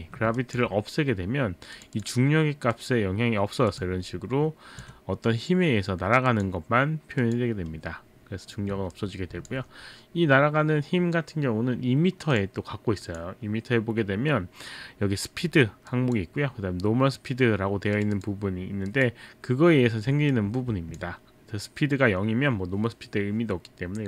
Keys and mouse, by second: 0.5 alt+click, 1.7 click, 2.0 click, 2.7 click, 6.3 click, 9.0 alt+click, 12.4 click, 13.0 click, 15.9 click, 17.9 click, 18.2 click, 18.9 click, 20.3 alt+click.